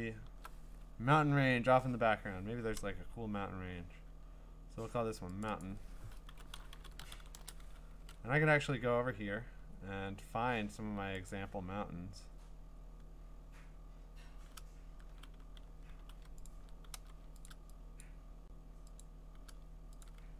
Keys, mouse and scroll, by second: 5.4 click, 5.6 click, 6.1-8.6 typing, 8.0 ctrl+Tab, 9.1-9.7 scroll down 4, 9.7 scroll up 2, 11.3 click, 11.7 scroll down 2, 12.2 scroll up 2, 12.5-12.8 scroll down 1, 13.5-14.1 scroll down 5, 14.7 scroll down 1, 14.7 scroll, 16.0 v, 16.5 ctrl+click, 17.0 v, 17.5 ctrl+click, 18.0 click, 19.0 click, 19.1 ctrl+click, 20.0 click, 20.2 ctrl+click.